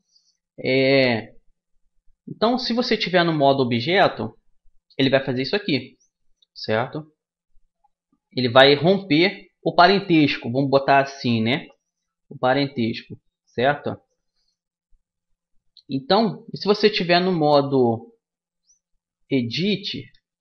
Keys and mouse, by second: 9.0 u, 17.8 Tab.